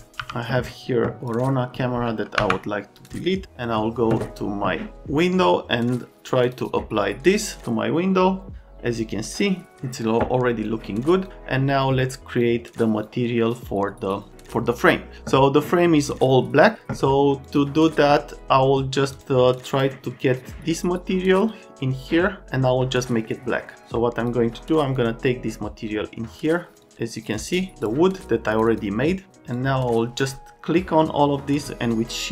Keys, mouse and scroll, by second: 0.2 g, 2.4 Delete, 3.0 click, 6.4 click, 10.6 click, 12.4 click, 13.0 click, 17.4 click, 19.1 click, 19.6 click, 21.4 click, 22.0 click, 22.9 middle click, 23.5 middle click, 24.2 click, 24.9 click, 26.8 click, 29.5 click, 30.7 right click, 31.9 shift+click.